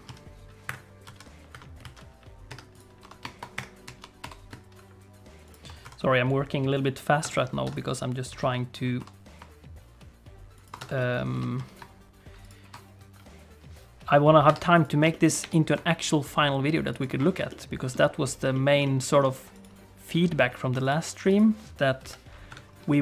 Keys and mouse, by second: 0.1 z, 1.0 KP_1, 1.5 KP_7, 1.8 alt+z, 2.5 Tab, 2.7 click, 3.0 r, 3.8 ., 4.2 r, 5.8 KP_1, 7.2 Tab, 7.6 Tab, 8.3 a, 9.0 r, 10.8 Tab, 10.9 middle click, 11.3 g, 13.0 KP_3, 14.5 Tab, 14.7 click, 15.1 shift+middle click, 15.4 g, 17.5 middle click, 18.5 shift+middle click, 18.8 middle click, 20.1 s, 21.3 click, 22.0 KP_3, 22.5 Tab, 22.9 middle click.